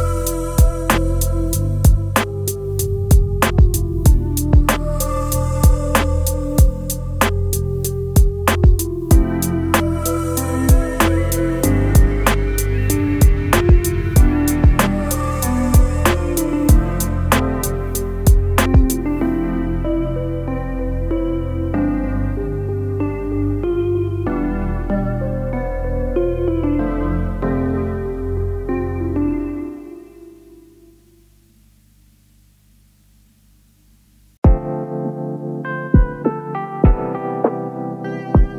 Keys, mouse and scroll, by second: 14.9 alt+click, 19.3 alt+click, 26.1 alt+scroll down 1, 27.1 space, 27.2 alt+scroll down 1, 27.8 space, 29.7-30.5 space.